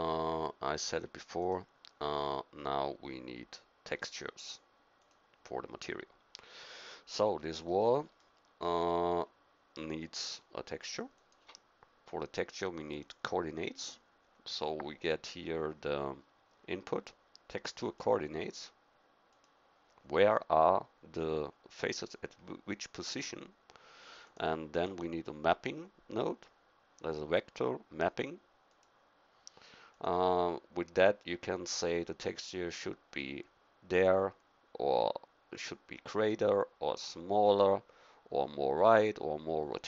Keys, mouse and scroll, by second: 3.1-4.5 drag, 5.7-7.4 middle drag, 24.2-25.8 drag, 39.2-39.8 scroll up 1.